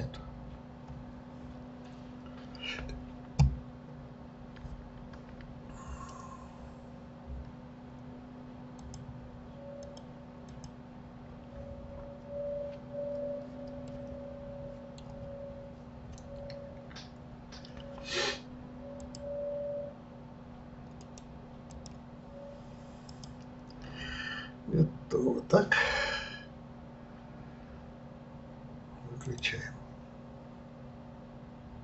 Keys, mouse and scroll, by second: 0.0-0.8 scroll up 2, 1.4 scroll up 2, 3.7 scroll up 1, 8.8-14.1 drag, 14.1-19.1 middle drag, 19.1 click, 21.7-23.0 right drag, 23.0 click.